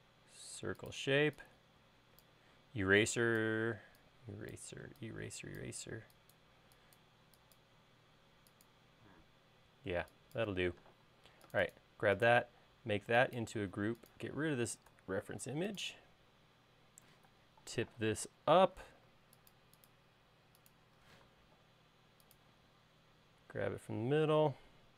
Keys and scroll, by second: 1.6 e, 11.4 space, 15.4 BackSpace, 17.7 q, 19.3 Left, 19.6 Right, 21.6 m.